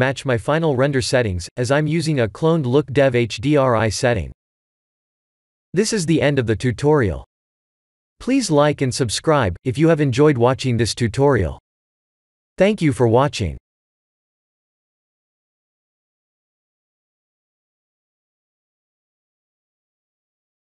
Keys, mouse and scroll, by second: 1.0 click.